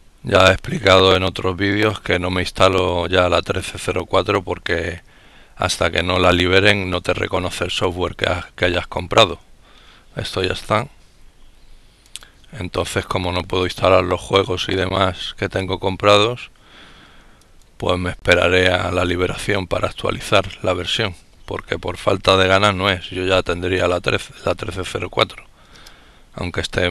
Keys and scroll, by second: 6.5 F12, 26.1 Return.